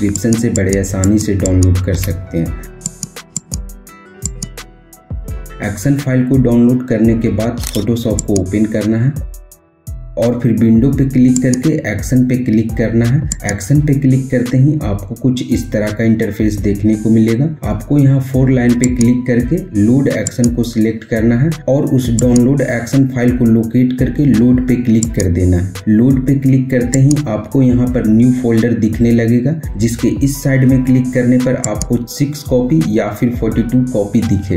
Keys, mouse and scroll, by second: 0.7 right click, 1.3 click, 1.7 Return, 3.2 click, 4.0 click, 7.9 click, 11.1 click, 13.0 click, 17.5 click, 24.7 click, 25.3 click, 31.3 click, 31.3 click.